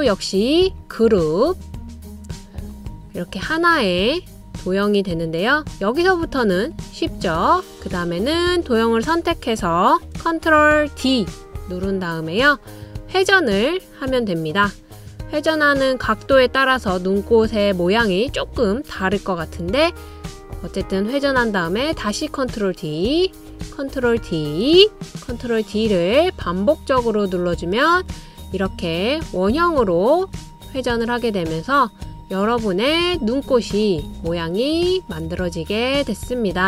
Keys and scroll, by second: 11.7 super+d, 20.6 super+d, 24.2 super+d, 25.9 super+d, 26.8 super+d, 27.6 super+d.